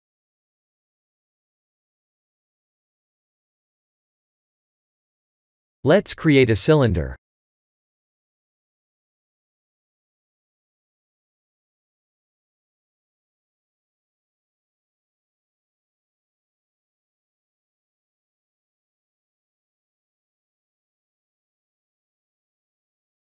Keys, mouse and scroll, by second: 0.8-2.2 scroll up 5, 2.4-2.9 scroll up 1, 3.9 click, 4.3-4.9 scroll down 3, 4.9 shift+z, 5.5 click, 6.4 shift+a, 11.5 r, 13.3 scroll down 1, 15.1 click, 15.1-16.7 scroll down 7, 17.6 click, 19.4 scroll up 1, 20.4 scroll up 8, 20.4 s.